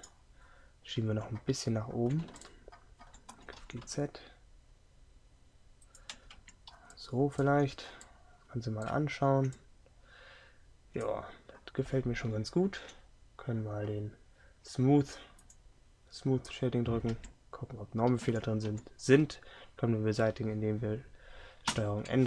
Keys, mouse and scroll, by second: 3.4 g, 6.5 Tab, 21.8 ctrl+n.